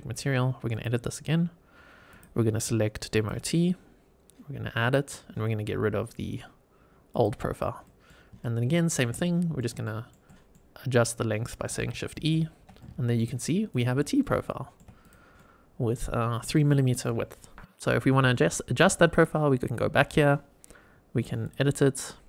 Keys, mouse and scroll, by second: 0.6 click, 1.3-2.0 scroll down 1, 2.0-3.2 drag, 2.0-3.2 scroll down 1, 4.7 click, 7.0 click, 7.7 middle click, 8.3 shift+right click, 9.1-9.5 middle drag, 9.7 shift+middle drag, 10.2 middle click, 12.1 shift+e, 12.6 scroll down 1, 12.7-13.1 middle drag, 13.6 click, 13.9 scroll up 3, 14.3-14.7 shift+middle drag, 15.0 click, 15.3 middle click, 19.0 click, 20.2 scroll down 2, 21.3 click, 21.8 scroll down 2.